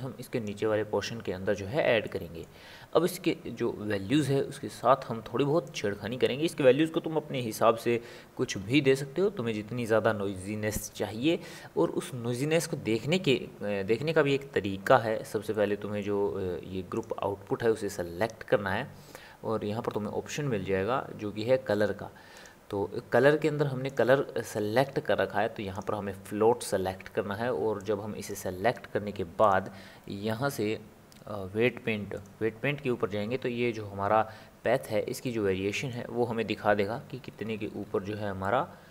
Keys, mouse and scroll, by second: 2.0-5.2 middle drag, 5.8-8.9 drag, 14.1-17.2 middle drag, 17.2-19.2 drag, 19.4 click, 19.7-20.1 drag, 22.4 click, 23.9-26.9 drag, 27.8-32.9 drag, 35.3-37.0 middle drag, 37.0 scroll down 1, 37.1-37.9 scroll up 6, 38.4 shift+middle click.